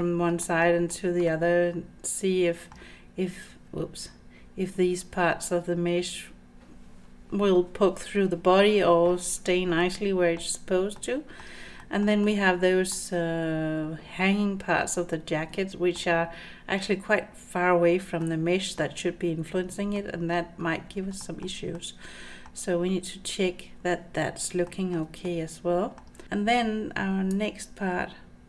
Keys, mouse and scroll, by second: 0.4 shift+middle click, 1.3-2.7 middle drag, 2.8-3.5 scroll down 1, 4.1-4.8 scroll up 3, 9.8-10.4 middle drag, 10.5-11.0 scroll down 2, 11.0-11.4 middle drag, 11.8 shift+middle drag, 12.2-12.9 middle drag, 13.0 scroll down 1, 15.1-16.0 middle drag, 16.3 scroll up 2, 18.2-18.8 middle drag, 19.9-20.4 middle drag, 21.2 shift+middle click, 21.8 middle click, 24.7 shift+middle drag, 25.3-26.0 middle drag, 27.3-28.4 drag.